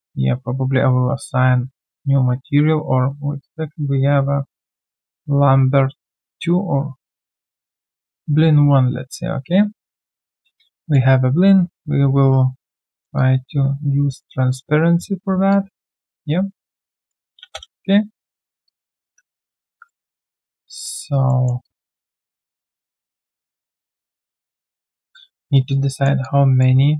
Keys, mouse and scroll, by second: 0.0 ctrl+right click, 9.1 ctrl+a, 16.7 alt+click, 17.4 space, 18.0 space, 18.6 alt+click, 19.0 ctrl+a, 19.3 alt+right click, 19.5 alt+click, 19.8 alt+middle click, 20.2 alt+click, 21.0 alt+right click, 21.2 alt+middle click, 21.6 alt+click, 25.1 alt+click, 25.5 alt+right click, 25.9 alt+middle click, 26.2 alt+click.